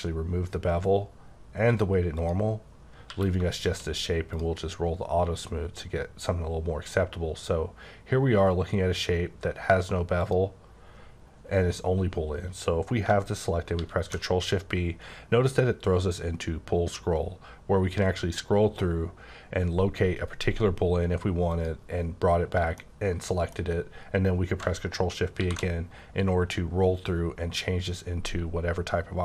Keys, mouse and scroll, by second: 1.7 click, 2.2 click, 3.1 q, 3.7 shift+click, 10.2 click, 13.0 click, 13.8 ctrl+shift+b, 14.4 scroll down 3, 15.5-17.5 scroll down 5, 17.5-18.3 scroll down 4, 18.3-19.2 scroll up 3, 19.2-19.8 scroll down 1, 19.8-20.9 scroll up 3, 20.9-21.5 scroll down 1, 21.5 click, 22.8 middle click, 23.7-24.6 scroll up 1, 25.4 shift+b, 26.1-28.4 scroll down 8, 28.4-28.8 scroll down 1, 28.8-29.2 scroll up 1.